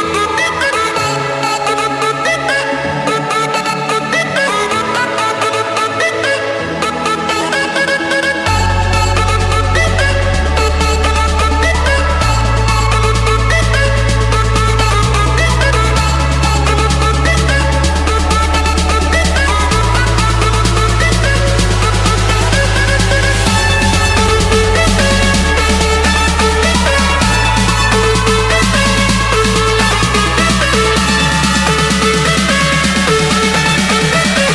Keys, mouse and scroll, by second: 0.0 Return, 5.9-6.9 drag, 8.2 click, 9.2 click, 12.3 click, 13.7 click, 14.4 click, 14.6 Escape, 16.2 F8, 18.8 5, 19.2 Return, 20.4 scroll, 20.8 Escape, 22.0 click, 22.9 click, 24.1 scroll, 24.2 click, 24.7 click, 25.4 click, 25.8 scroll, 25.9 Escape, 26.6 click, 26.8 click, 27.7 shift+click, 29.7 ctrl+1, 31.9 click, 33.0 typing, 33.5 Return.